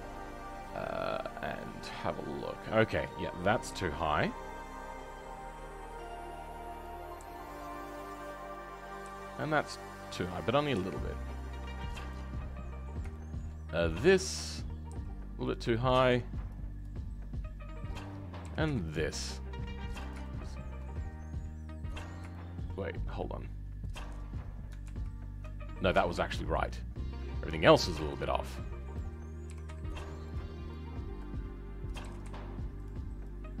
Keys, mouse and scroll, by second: 8.9 click, 13.1-14.1 shift+middle drag, 14.1 click, 14.9 g, 15.7-16.8 shift+middle drag, 16.8 click, 18.5 g, 20.2-23.8 shift+middle drag, 23.8 click, 24.1-24.8 scroll up 2, 24.8 ctrl+z, 25.6-26.2 scroll down 5, 26.2-28.9 shift+middle drag, 28.9 click.